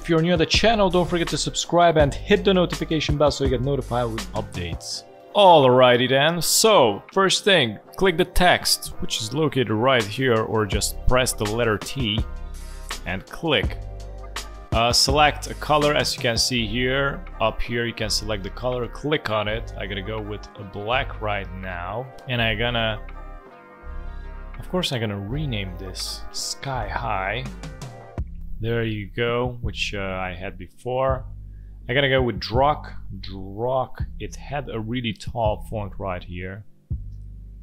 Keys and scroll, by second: 25.7 ctrl+a, 26.8 Caps_Lock, 27.4 s, 28.2 h, 30.4 ctrl+a, 32.9 d, 33.1 r, 33.3 u, 33.5 k.